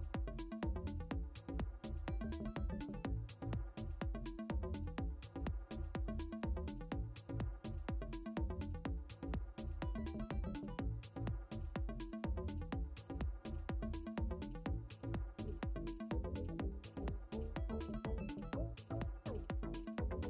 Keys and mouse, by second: 0.7 click, 1.0 space, 1.3 space, 2.0 ctrl+z, 3.4 space, 4.2 click, 7.2 click, 8.9 click, 18.5 click.